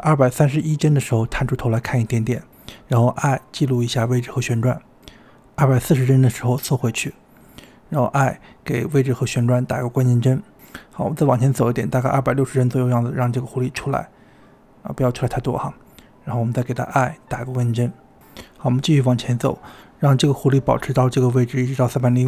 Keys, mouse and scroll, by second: 1.2 g, 3.9 i, 5.5-7.4 drag, 6.5 g, 7.4 g, 9.3 i, 10.6-12.0 drag, 13.0 g, 17.2 i, 18.4-19.8 drag, 20.6-21.4 drag, 21.4-22.2 middle drag.